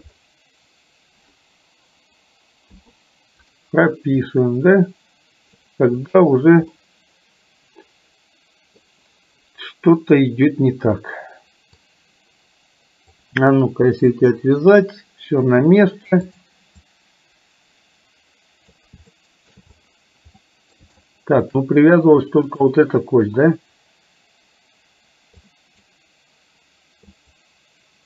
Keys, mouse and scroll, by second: 2.9 i, 4.4-5.8 drag, 6.9-8.9 middle drag, 11.8-13.3 drag, 14.1 Delete, 16.4 click, 17.0-18.9 drag, 19.3 shift+middle click, 20.5-20.9 middle drag, 21.0-21.5 shift+middle drag, 22.4 click, 25.6-26.0 drag, 27.1 click.